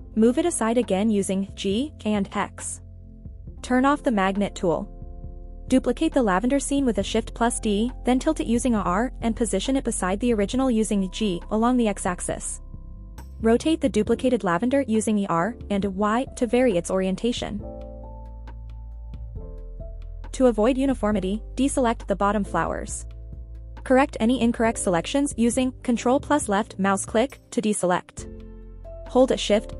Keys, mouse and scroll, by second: 0.2 x, 1.3 click, 1.7 scroll down 1, 2.9 click, 3.3 scroll up 1, 3.7 scroll down 1, 4.2 shift+d, 4.5 right click, 4.9 r, 5.9 click, 6.1 g, 6.4 y, 6.7 x, 8.0 click, 8.4 scroll up 1, 8.7 middle click, 9.3 r, 9.6 z, 11.3 click, 12.0-12.5 middle drag, 12.9 r, 14.2 click, 14.6 middle click, 16.2 KP_1, 17.3 r, 17.4 middle click, 17.7 middle click, 18.6 click, 19.4 r, 19.9 click, 20.2 g, 20.5 y, 21.1 x, 22.3 click, 22.6-23.5 middle drag, 24.2 middle click, 25.6 scroll up 1, 25.9 shift+middle drag, 26.3 scroll up 1, 26.8 click, 27.6 shift+click, 28.0 click, 28.8 middle click, 29.4 shift+click.